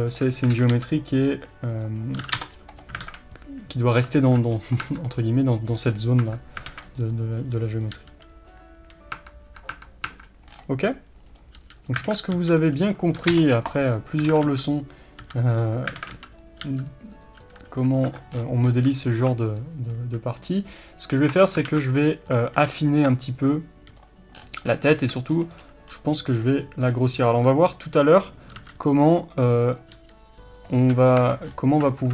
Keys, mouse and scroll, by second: 0.0-2.8 shift+middle drag, 0.3 scroll up 1, 0.6 alt+a, 1.9 b, 2.8 click, 3.1 alt+a, 4.2-6.9 shift+middle drag, 4.5-4.9 scroll up 1, 4.9 Tab, 6.7 alt+a, 6.9 click, 7.7 click, 8.0 g, 9.2 Tab, 10.5-10.9 scroll down 1, 10.9-11.3 scroll up 1, 11.3 click, 11.6 g, 12.1 alt+a, 12.8 b, 13.8 click, 14.3 alt+a, 14.7 b, 16.0 alt+a, 16.4 b, 17.4 r, 18.1 Tab, 18.4 scroll down 1, 19.1-28.2 shift+middle drag, 19.9-20.5 scroll up 1, 21.4 Tab, 21.7 alt+a, 24.0 b, 24.4 scroll down 1, 25.2-26.3 scroll up 2, 26.3-26.9 scroll down 2, 26.9-27.4 scroll up 2, 27.4 s, 28.2 click, 28.6 s, 29.8 click, 30.0 g, 30.9 a, 31.2 Tab, 31.5-31.9 scroll down 2, 31.9-32.1 shift+middle drag.